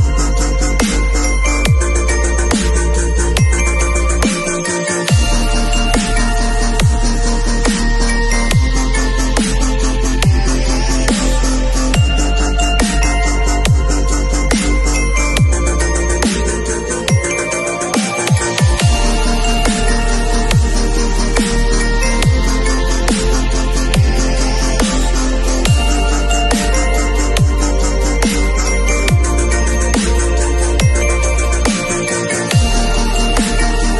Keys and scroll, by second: 9.5 space, 23.7 b, 28.7 ].